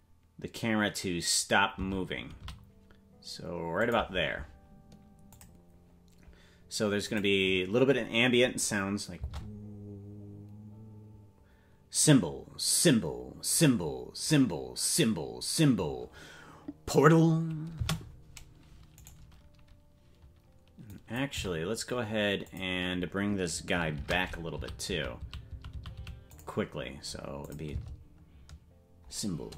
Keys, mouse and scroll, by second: 5.3 click, 7.0 click, 9.1 space, 17.7 space, 18.9-20.9 right drag, 20.9 click, 21.3 g, 23.9 shift+`, 27.4 click, 27.7 space.